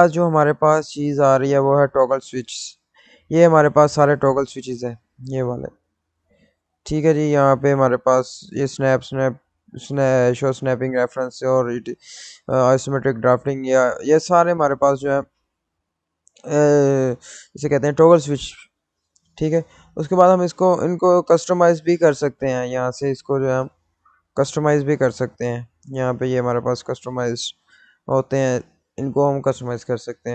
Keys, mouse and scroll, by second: 15.4 click, 25.2 click, 29.1 click, 29.1 click.